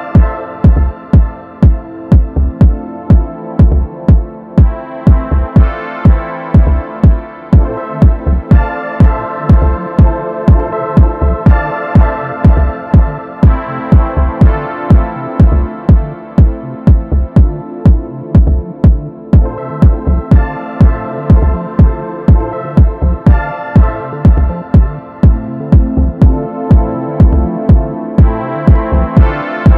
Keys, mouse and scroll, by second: 0.6-1.9 middle drag, 1.9 alt+e, 15.3-17.3 drag, 17.3 s, 20.6-21.3 middle drag, 21.3 Tab, 21.6 scroll down 1, 21.8-24.6 middle drag, 24.6-24.9 scroll down 2, 24.9-26.1 middle drag, 26.1 KP_1, 26.6-27.0 scroll up 2, 27.0-27.5 shift+middle drag, 27.5 scroll down 2, 27.8-29.7 middle drag.